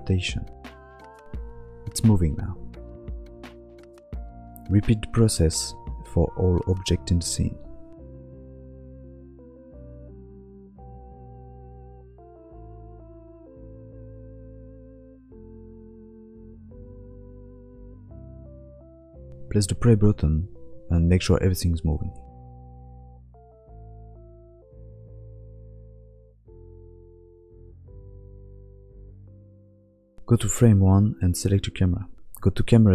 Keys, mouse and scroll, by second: 6.5 click, 6.7-19.1 typing, 6.9 click, 7.4 click, 8.0 click, 8.9 click, 9.2 click, 9.8 ctrl+z, 9.9 ctrl+z, 10.0 ctrl+z, 10.3 click, 10.7 click, 11.2 click, 11.5 click, 11.7 click, 12.2 click, 12.4 click, 12.6 click, 12.7 click, 13.3 click, 13.5 click, 14.0 ctrl+z, 14.1 click, 14.4 ctrl+z, 14.4 click, 14.4 ctrl+z, 14.5 ctrl+z, 14.5 ctrl+z, 14.8 click, 14.9 click, 15.4 click, 15.7 click, 15.8 click, 15.9 click, 16.3 click, 16.4 click, 16.4 click, 16.7 click, 17.3 click, 17.4 click, 17.9 click, 17.9 click, 18.4 click, 18.5 click, 18.7 click, 19.2 click.